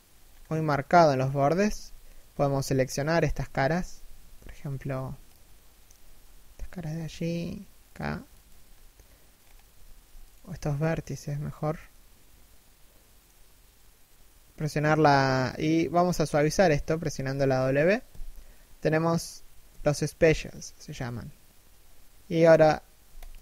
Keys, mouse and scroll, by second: 0.3 KP_3, 1.0 KP_1, 2.1 z, 2.3 scroll up 1, 3.4 z, 3.7 a, 4.0 b, 8.3-9.0 scroll down 1, 9.0-10.0 scroll up 1, 10.0 a, 10.3 alt+right click, 11.1-11.5 scroll down 1, 11.5 middle click, 17.8 w.